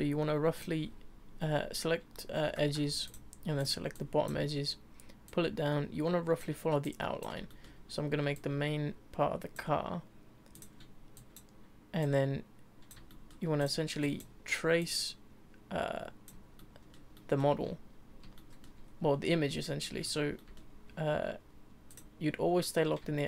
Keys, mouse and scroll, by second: 0.5 click, 2.6 2, 3.0 click, 3.6 click, 3.9 click, 5.2 click, 6.8 click, 7.5 shift+middle click, 8.3 click, 10.5 click, 11.1 click, 12.0 click, 13.1 shift+middle click, 13.6 click, 14.0 click, 14.8 click, 16.6-18.8 shift+middle drag, 18.8-19.6 scroll down 2, 19.6 shift+middle click, 20.0-20.4 scroll up 2, 20.4-21.9 middle drag, 21.9 click, 23.1 scroll up 1, 23.1-23.2 shift+middle drag.